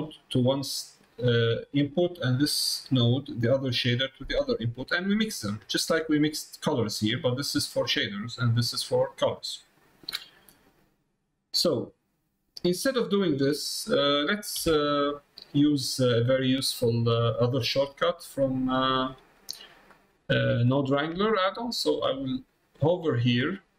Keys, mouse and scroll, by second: 2.6 middle click, 6.0 middle click, 7.4 middle click, 8.3 middle click, 12.6 middle click, 13.6 click, 15.0 middle click, 15.8 middle click, 16.2 middle click, 16.5 middle click, 17.4 click, 18.4 middle click, 19.2 middle click, 19.6 middle click, 20.6 click, 22.7-23.7 drag.